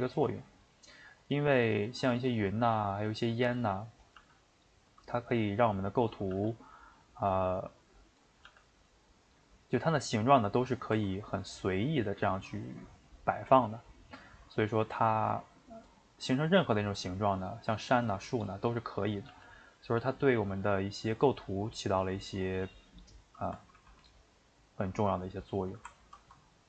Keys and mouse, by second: 1.3 click, 1.8 click, 2.1 g, 4.0 click, 4.1 g, 6.1 click, 6.3 g, 8.2 click, 8.4 g, 9.1-10.5 middle drag, 10.5 a, 10.9 s, 13.3-15.8 middle drag, 15.8 click, 16.0 middle click, 16.6 g, 18.7 click, 19.3 g, 23.8 ctrl+r.